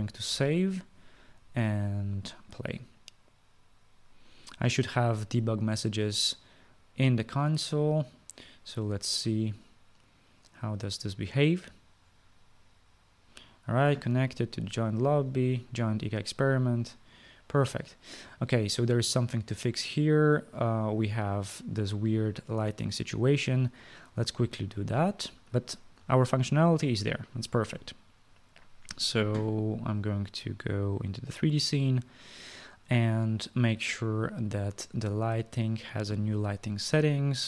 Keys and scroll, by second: 0.5 ctrl+s.